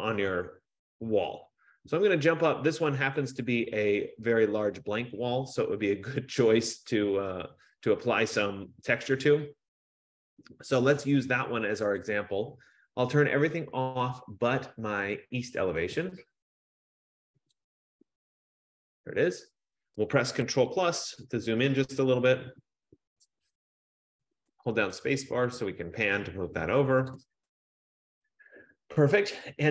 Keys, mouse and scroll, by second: 12.3 click, 18.1 click, 21.6 ctrl+=, 22.3 ctrl+=, 23.2 ctrl+=, 25.5-28.1 scroll, 27.2 click.